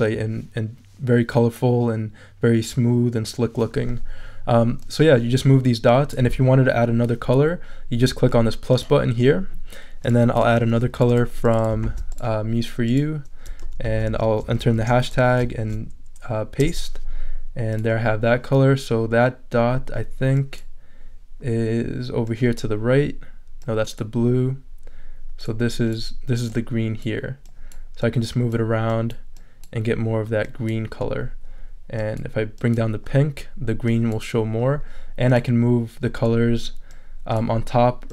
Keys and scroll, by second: 11.8 super+c, 13.8 super+a, 14.4 shift+super+a, 14.7 shift+super+3, 15.4 shift+super+3, 15.6 shift+super+v, 16.6 super+Return.